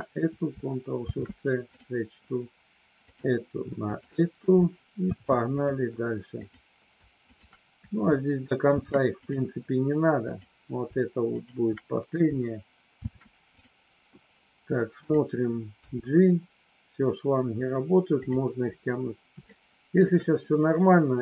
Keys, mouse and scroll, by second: 1.0 ctrl+shift+c, 3.1 click, 3.7 shift+click, 5.0 ctrl+shift+c, 6.3 click, 8.6 ctrl+shift+c, 11.3 shift+click, 13.0 ctrl+shift+c, 15.0 click, 15.7 g, 18.2 click, 19.5 shift+middle click.